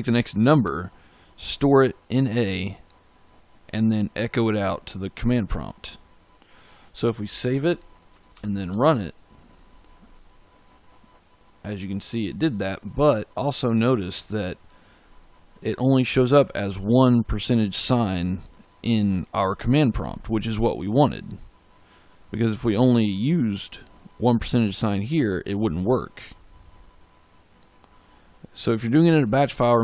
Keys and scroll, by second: 7.2 ctrl+s, 8.2 ctrl+shift+z.